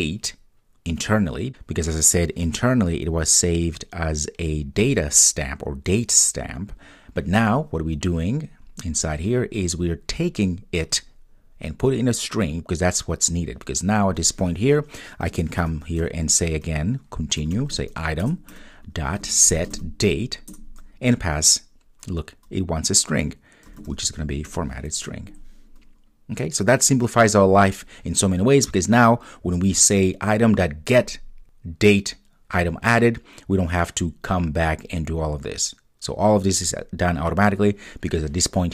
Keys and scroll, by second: 18.3 Return.